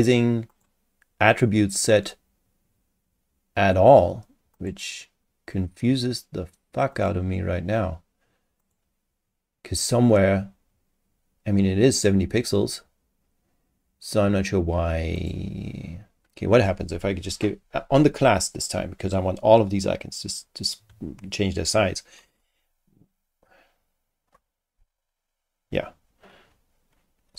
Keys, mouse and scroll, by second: 0.5 click, 4.5 click, 6.9 click, 8.6 click, 15.2 click, 16.5 click, 27.1-27.3 typing.